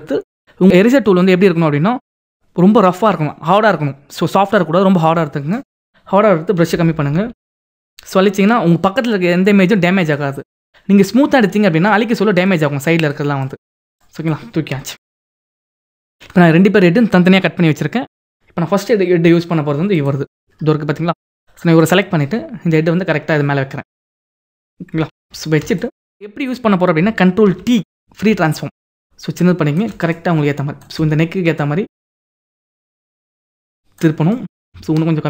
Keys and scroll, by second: 6.6 [, 11.4 [, 15.1 ctrl+-, 25.2 ctrl+=, 27.7 ctrl+t.